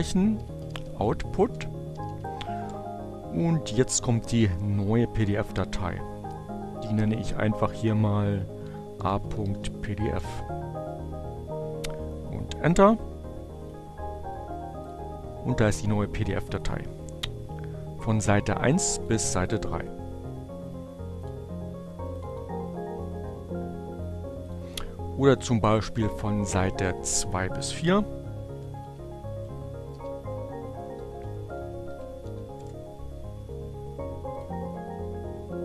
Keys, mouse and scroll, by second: 0.0-1.2 typing, 7.5-8.7 typing, 8.2 click, 13.3 click, 15.4 click, 17.1 click, 20.1 click, 20.8 click, 22.7 click, 23.8 click, 26.4 click, 27.5 click, 28.3 Up, 28.4 Left, 29.7 Delete, 30.2 2, 30.3 Right, 30.8 Delete, 31.0 4, 31.4 Right, 31.9 Left, 32.1 Delete, 32.2 b, 33.4 Return.